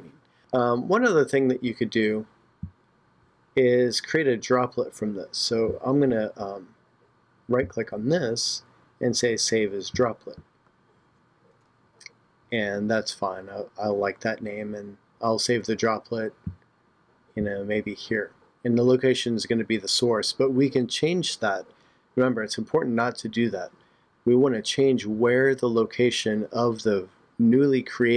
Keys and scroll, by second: 0.4 shift+super+Tab.